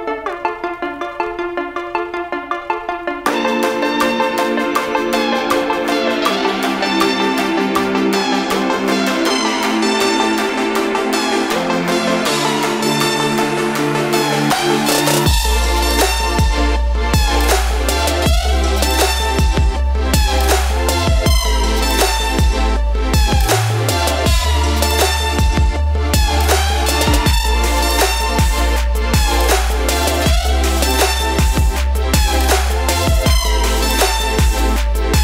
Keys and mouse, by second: 6.2 click, 9.7 ctrl+g, 12.1 ctrl+t, 12.8 shift+Up, 16.5 click, 18.8-20.3 typing, 20.6 Return, 21.6 click, 22.5 shift+Up, 24.7 click, 24.8 click, 27.5 click, 28.7 click.